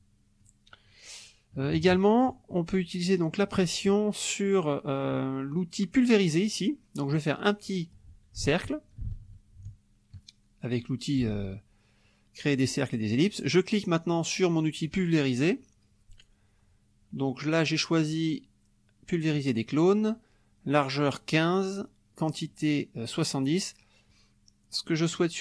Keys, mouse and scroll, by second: 1.6 KP_Subtract, 2.5 middle click, 7.1 click, 8.4-11.3 ctrl+drag, 14.9 click.